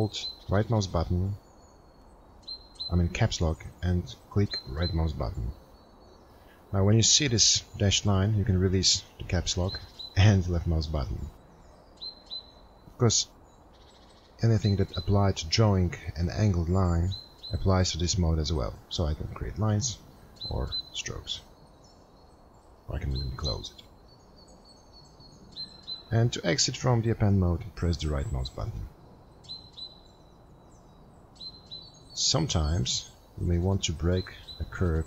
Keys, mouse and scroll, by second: 5.8 right click.